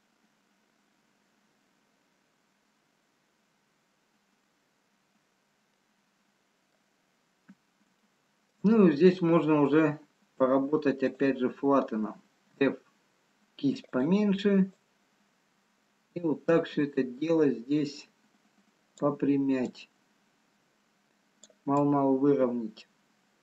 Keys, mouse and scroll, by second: 6.0 middle click, 7.6-8.3 scroll up 3, 8.3 shift+middle click, 11.2 click, 13.4 f, 15.3 click, 21.3 click, 22.4 click.